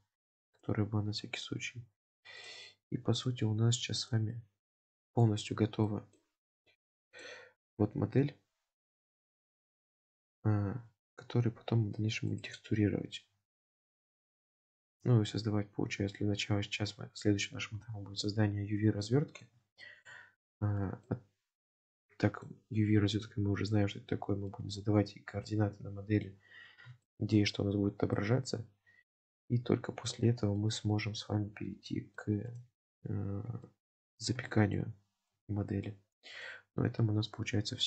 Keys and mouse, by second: 2.4 click, 3.2 click, 4.1 click, 4.4-5.2 middle drag, 5.9 middle click, 7.2 click, 7.9-12.0 middle drag, 12.4 click, 14.5 click, 14.9-19.6 middle drag, 19.9 shift+middle drag, 20.9 shift+middle drag, 21.8-22.5 middle drag, 24.5-26.2 middle drag, 27.1 shift+middle drag, 28.2-30.1 middle drag, 30.6-32.2 middle drag, 32.5 click, 33.7 shift+middle drag, 34.6 shift+middle click, 35.9-36.5 middle drag.